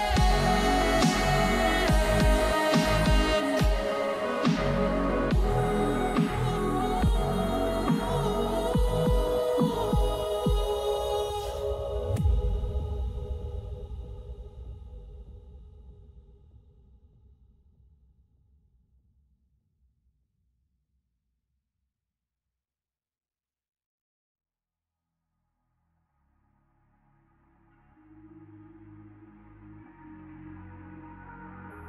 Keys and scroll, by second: 3.7 q, 7.7 q, 10.7 q, 13.4 q.